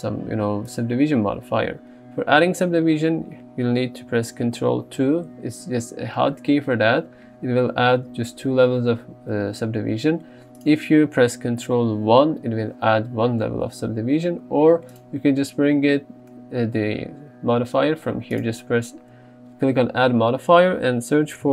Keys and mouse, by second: 5.2 ctrl+2, 10.6 click, 12.3 ctrl+1, 15.0 click, 18.5 click.